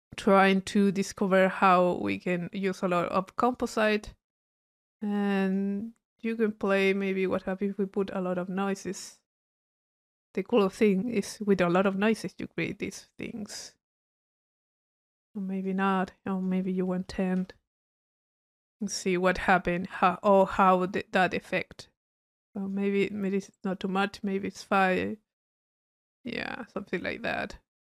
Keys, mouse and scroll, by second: 0.9 click, 1.7 middle click, 3.5 click, 4.4 middle click, 5.1-5.8 drag, 7.3-12.1 drag, 14.4-15.7 drag, 16.2 drag, 16.8 click, 21.7 middle click, 22.5 click, 24.6-25.0 drag, 26.7 middle click.